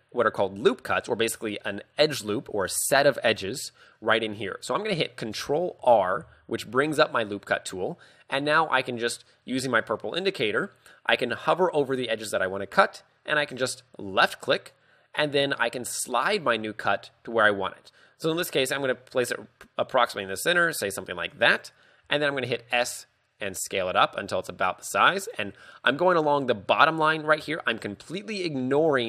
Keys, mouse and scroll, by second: 5.8 ctrl+r, 21.5 click, 22.8 s, 25.3 click, 27.5 z.